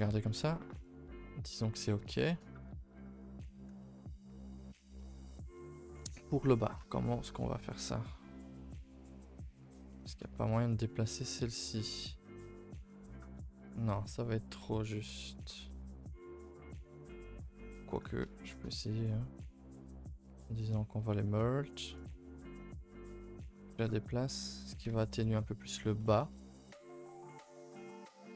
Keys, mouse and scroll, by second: 9.1-10.1 middle drag, 10.1-10.6 scroll up 3, 10.6 middle click, 11.5-11.8 scroll up 1, 11.8 middle click, 12.5 alt+click, 14.5 KP_1, 15.2 shift+middle click, 15.4 scroll up 2, 17.9 click, 18.4 click, 22.6 click, 24.5 click, 26.0-26.7 middle drag, 26.7 ctrl+s, 27.6 KP_1.